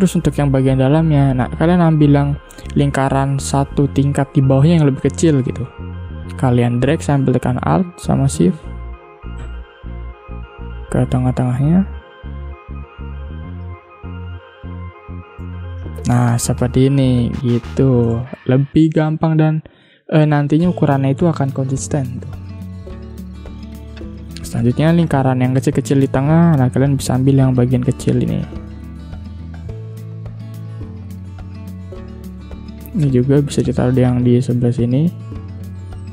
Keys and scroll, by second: 2.7 ctrl+z, 13.7 i, 14.7 v, 15.3 space, 18.1 space, 25.0 space, 32.4 ctrl+z.